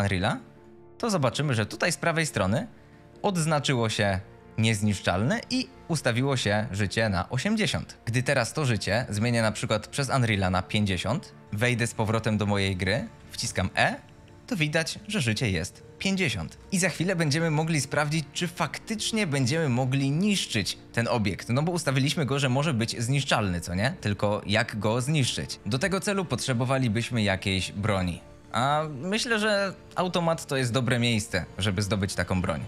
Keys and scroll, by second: 11.4 Escape, 12.3-13.7 typing, 16.3 Escape, 16.4-17.4 typing, 18.9 s, 23.8 w, 24.1 a, 27.6-28.4 typing.